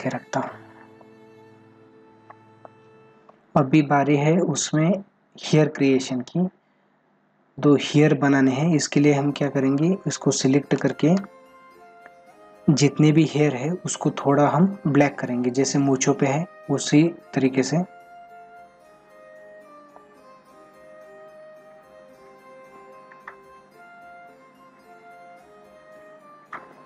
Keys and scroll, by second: 7.1 ctrl+=.